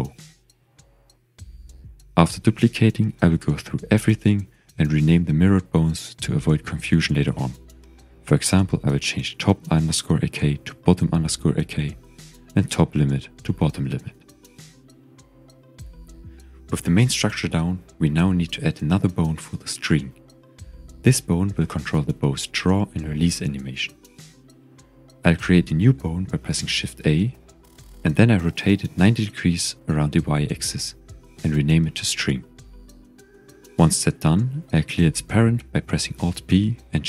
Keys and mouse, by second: 0.1 shift+click, 2.9 shift+click, 4.4 click, 5.2-9.9 drag, 7.5 t, 11.1 click, 11.9-16.6 drag, 13.7 t, 17.7 click, 18.5 ctrl+click, 20.6 shift+middle click, 22.2 shift+click, 23.7 ctrl+s, 25.8 shift+a, 29.6 r, 30.9 KP_9, 31.0 KP_0, 31.3 KP_Enter, 32.2 click, 33.2-34.7 drag, 36.3 alt+p.